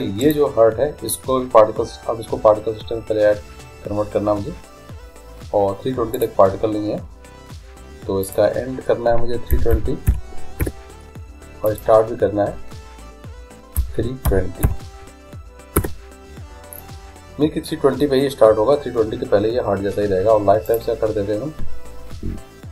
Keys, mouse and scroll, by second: 0.2-2.0 right drag, 6.2-8.2 drag, 8.3-10.2 drag, 11.7-13.5 drag, 20.7-22.7 drag.